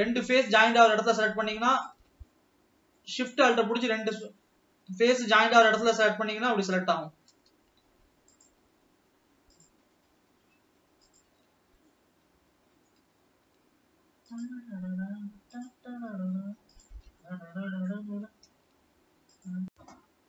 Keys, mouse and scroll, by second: 0.8 alt+shift+click, 2.0 alt+shift+click, 2.4-4.2 middle drag, 4.2 alt+shift+click, 5.8 alt+shift+click, 6.5-8.7 shift+middle drag, 8.7 alt+shift+click, 9.8 alt+shift+click, 11.4 alt+shift+click, 12.0-14.6 middle drag, 14.6 alt+shift+click, 16.0 alt+shift+click, 17.3 alt+shift+click, 17.5-18.1 middle drag, 18.1 scroll up 2, 19.7 click.